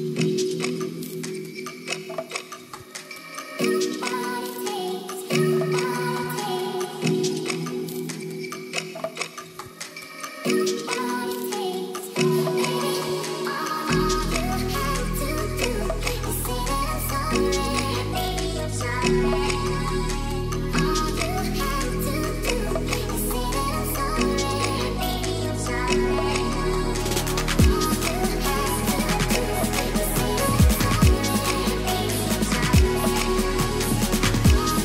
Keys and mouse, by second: 0.0-1.1 drag, 1.2 Tab, 1.3 click, 2.7 shift+click, 3.2 click, 4.3 2, 4.6 click, 5.9 click, 6.4 shift+click, 6.5 click, 7.5 middle click, 9.5 click, 9.9 shift+click, 10.2 click, 11.2 s, 14.2 click, 14.3 Tab, 14.6-15.4 drag, 15.6 shift+click, 15.8 Tab, 16.7 shift+click, 20.8 middle click, 21.3 shift+drag, 22.4 click, 23.6 shift+click, 26.2 shift+click, 27.5 middle click, 29.0 ctrl+s, 29.2 click, 30.2 click, 30.8 s.